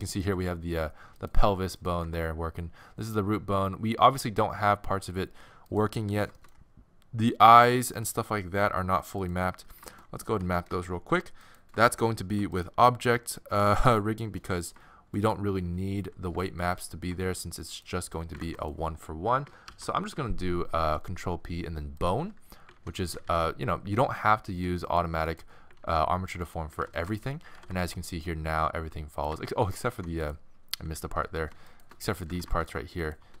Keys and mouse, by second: 0.3 g, 1.8 right click, 2.0 g, 6.0-10.4 middle drag, 10.4 ctrl+Tab, 11.4-13.6 middle drag, 14.2-16.3 middle drag, 16.0 z, 18.4 ctrl+Tab, 19.7 ctrl+p, 22.7 ctrl+Tab, 23.0 z, 24.7 z, 24.9-27.2 drag, 25.8 ctrl+Tab, 26.6 z, 27.2-28.2 middle drag, 27.5 r, 29.9 ctrl+Tab, 30.2-33.4 drag, 30.8 z, 31.3 z, 32.0 z.